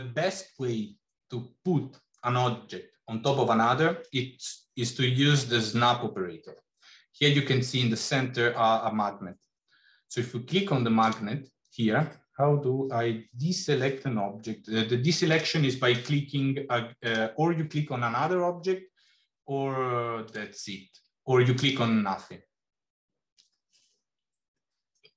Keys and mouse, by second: 15.3 click, 15.8 click, 24.4-24.8 middle drag.